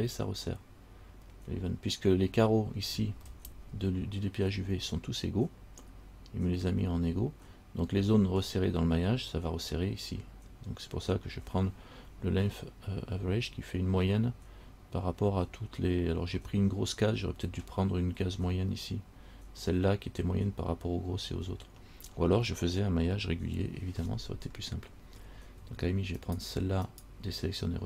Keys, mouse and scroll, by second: 3.1-5.5 scroll up 6, 26.4 shift+right click, 27.0 shift+right click.